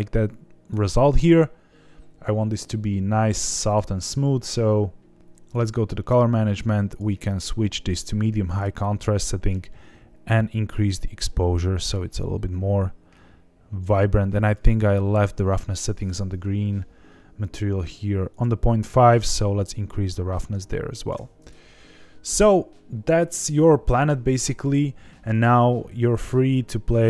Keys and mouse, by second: 3.6 click, 6.8-8.6 drag, 9.4-13.9 drag, 14.4 click, 16.0 click, 17.7 click, 19.1-21.2 drag, 24.6 click.